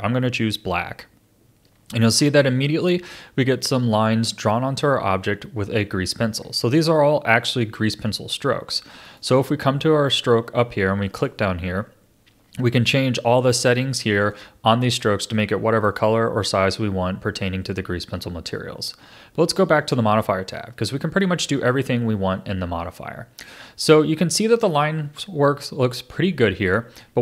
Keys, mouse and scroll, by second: 2.1-4.8 middle drag, 4.8 a, 6.1-9.0 middle drag, 9.0 click, 11.2 click, 15.3-18.3 middle drag, 19.6 click, 20.5-23.5 middle drag, 24.3-27.0 middle drag, 27.0 a.